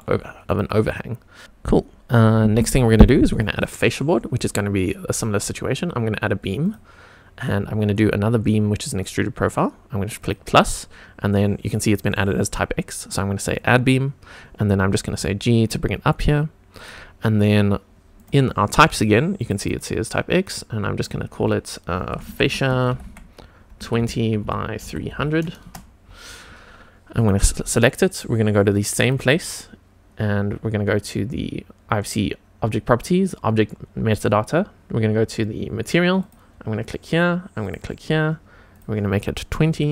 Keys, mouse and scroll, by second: 0.4 click, 6.6-14.3 drag, 15.0 g, 16.8 click, 18.2 click, 19.3 click, 19.6-25.6 drag, 25.1 0, 27.1 click, 29.0 click, 36.2 click, 37.6 click, 38.7-39.9 drag.